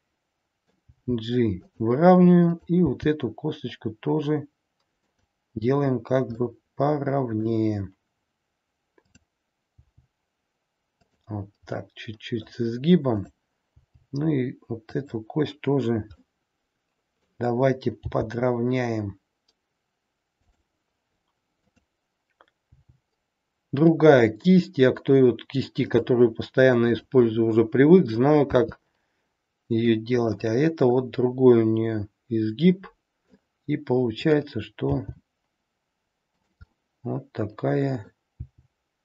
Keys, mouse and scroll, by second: 0.9 g, 2.4 click, 2.9 g, 6.4 middle click, 9.0 click, 9.8 g, 11.8 middle click, 13.1 click, 13.6 g, 16.3 middle click, 18.0 g, 22.6 g, 28.5 e, 30.9 middle click, 34.8 g, 36.6 middle click, 38.3 g.